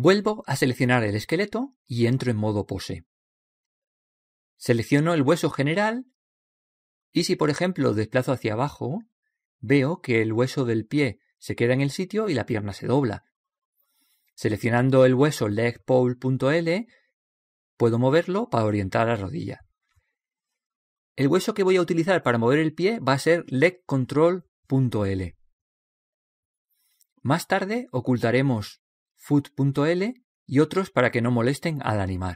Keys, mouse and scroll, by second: 0.7-2.5 drag, 2.6 click, 2.6 right click, 5.8-7.4 right drag, 7.4-9.2 drag, 9.3 click, 9.3 right click, 9.4-9.8 drag, 9.4-9.8 right drag, 15.4-17.4 middle drag, 17.6-19.4 scroll down 1, 18.5-20.3 right drag, 19.4 scroll down 1, 19.6 g, 22.8-24.7 middle drag, 24.0-25.9 right drag.